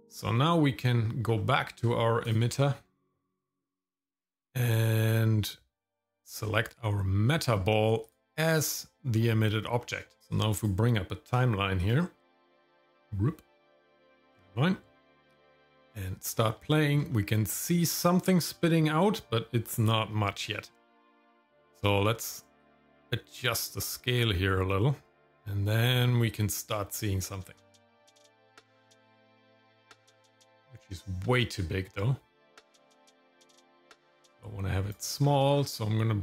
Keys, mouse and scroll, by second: 0.5 middle click, 0.8 scroll up 2, 1.4 middle click, 1.8-2.2 scroll up 1, 2.2 click, 2.7 middle click, 4.0-4.5 scroll down 3, 6.3 click, 9.1 middle click, 9.8 middle click, 10.2 scroll down 1, 10.3 click, 11.9 click, 14.1 click, 15.5 click, 16.7 shift+middle click, 17.1 middle click, 22.6-34.9 drag, 35.2-36.2 scroll up 4.